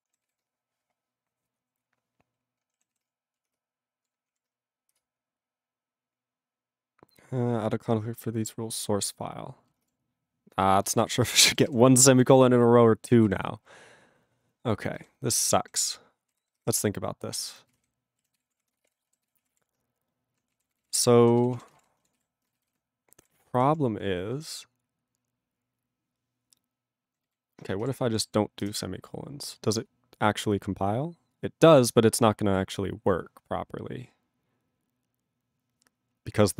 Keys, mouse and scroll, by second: 0.2 ctrl+s, 10.0 ctrl+s, 10.8 ctrl+b, 11.1 ctrl+space, 11.5 ctrl+alt+b, 11.6 ctrl+g, 12.3 ctrl+s, 13.2 ctrl+/, 16.3 ctrl+g, 16.4 ctrl+/, 17.7 ctrl+g, 17.8 ctrl+/, 18.4 ctrl+s, 18.4 ctrl+p, 18.7 ctrl+space, 18.8 ctrl+e, 18.8 ctrl+g, 19.2 ctrl+s, 19.4 ctrl+a, 19.4 ctrl+o, 19.5 Tab, 20.6 ctrl+a, 20.6 ctrl+k, 20.8 ctrl+space, 20.9 ctrl+e, 20.9 ctrl+g, 21.4 ctrl+s, 21.5 ctrl+a, 21.6 ctrl+space, 21.7 ctrl+e, 21.7 ctrl+g, 22.1 ctrl+s, 22.7 alt+b, 23.0 ctrl+n, 23.5 ctrl+p, 24.3 ctrl+n, 27.0 ctrl+n.